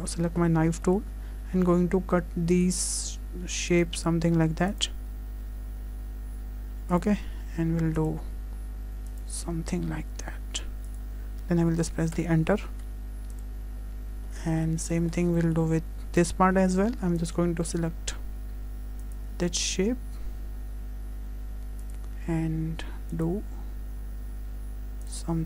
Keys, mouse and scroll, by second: 0.5 click, 0.5 scroll up 2, 0.9 shift+middle click, 2.6 click, 13.4 click, 15.3 click, 15.3 shift+middle click, 15.3 scroll down 3, 15.4 shift+middle click.